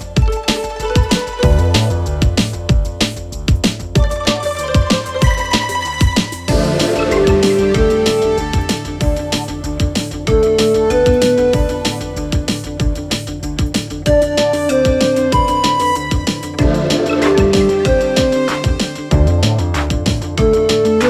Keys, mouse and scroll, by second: 1.8 click, 2.6-3.7 typing, 4.4 click, 13.1 click, 15.9 Return, 18.1 click, 20.7 click.